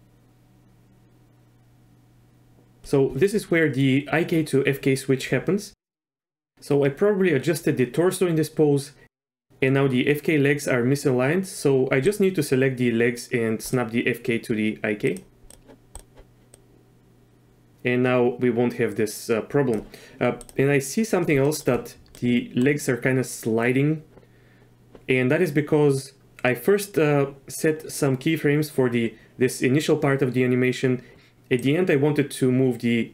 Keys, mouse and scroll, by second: 15.0 click, 15.9 click, 16.5-19.7 drag, 21.4 shift+middle click, 22.1-22.6 middle drag, 31.6-33.1 drag.